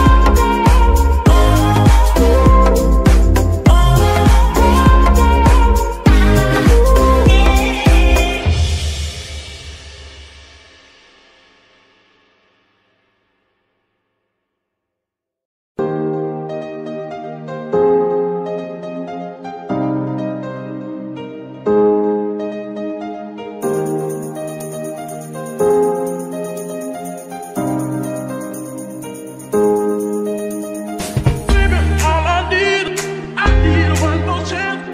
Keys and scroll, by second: 6.5 g, 9.6 z, 10.7 t, 11.5 g, 13.4 g, 16.2 z, 22.5 KP_9, 22.5 KP_0, 22.7 Return, 23.8 KP_Subtract, 24.1 KP_9, 24.2 KP_0, 24.5 Return.